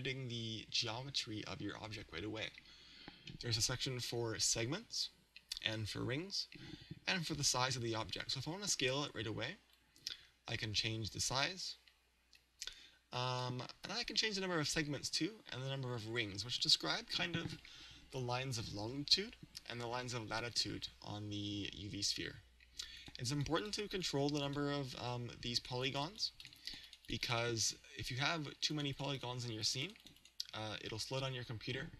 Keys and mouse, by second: 9.8 click, 23.0-31.9 drag.